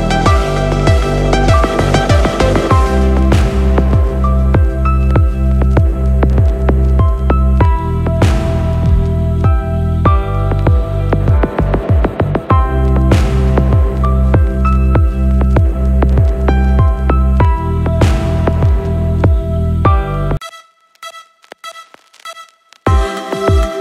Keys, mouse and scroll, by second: 0.0 click, 1.2 middle click, 1.4-2.4 typing, 1.6 click, 1.8 drag, 2.4 Right, 2.9 middle click, 3.1 shift+middle click, 3.4 scroll up 1, 3.6 middle click, 4.1 shift+middle click, 5.0 click, 6.3 n, 6.6 click, 6.6 n, 6.9 middle click, 7.1 scroll down 3, 7.5 click, 7.8 scroll down 1, 7.9-9.3 scroll up 8, 9.3-10.7 drag, 11.9 n, 12.3-12.9 scroll down 2, 12.9-13.9 scroll down 3, 13.9-14.7 drag, 15.4-15.9 scroll up 3, 15.9 middle click, 16.4-17.2 scroll up 6, 17.6 middle click, 18.0-18.6 scroll up 3, 18.6 middle click, 19.4-20.2 scroll up 3, 21.0 click, 22.5 click.